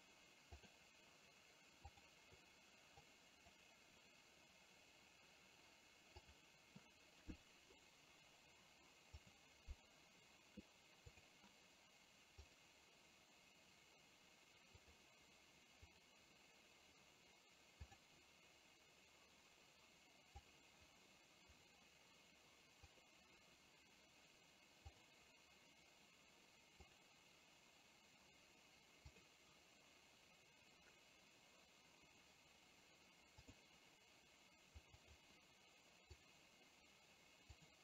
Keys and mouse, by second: 17.9 click.